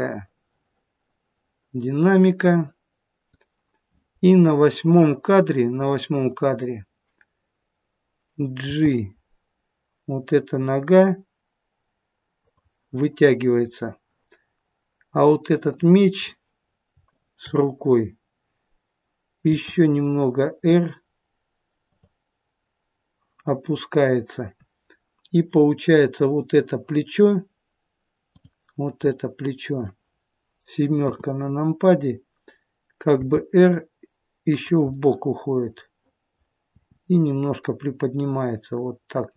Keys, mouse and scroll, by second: 6.2 click, 8.7 g, 15.7 click, 17.0 shift+click, 19.5 r, 25.5 middle click, 28.3 click, 29.1 middle click, 31.1 KP_7, 33.3 r, 34.8 middle click, 36.7 r.